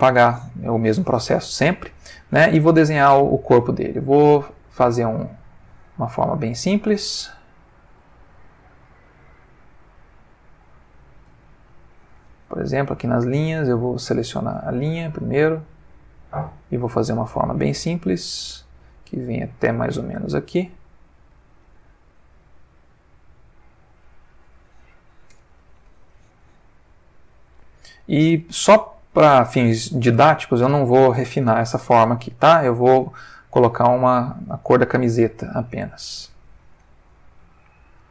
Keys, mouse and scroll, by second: 0.2 click, 6.6 click, 8.6-12.1 drag, 11.5 Escape, 12.8 click, 13.7 click, 14.3 click, 16.1-21.5 drag, 22.6-24.2 drag, 25.3 Return, 31.2 ctrl+middle click, 33.9 click.